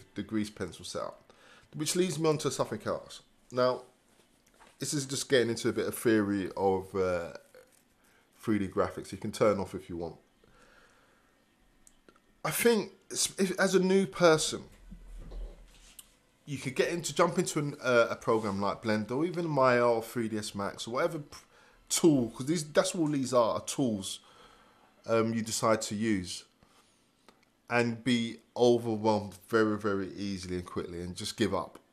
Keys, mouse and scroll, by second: 2.4 Return.